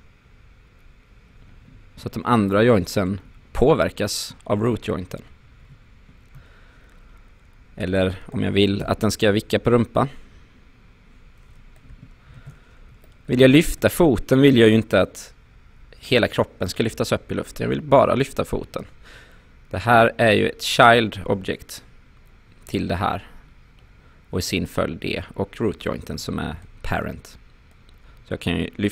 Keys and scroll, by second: 5.6 ctrl+z, 8.8 e, 12.3 ctrl+z, 18.0 w.